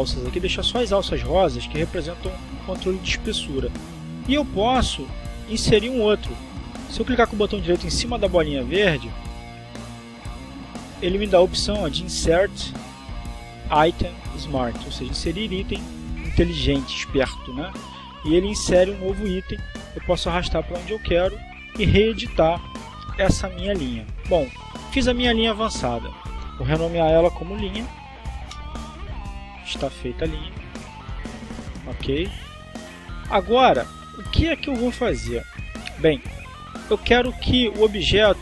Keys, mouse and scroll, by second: 4.4 right click, 6.4 click, 9.4-11.3 drag, 11.9 right click, 18.3 click, 19.3 click, 20.9 click, 25.5 click, 26.5 click, 27.8-29.1 typing, 29.3 Return, 31.6 click.